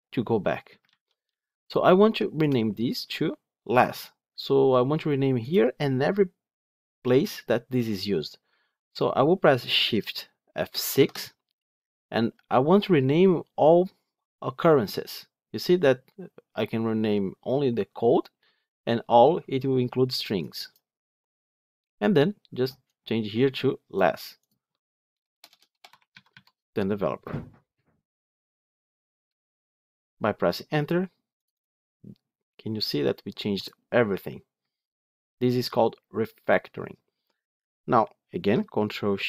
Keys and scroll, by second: 0.7 ctrl+z, 10.9 shift+F6.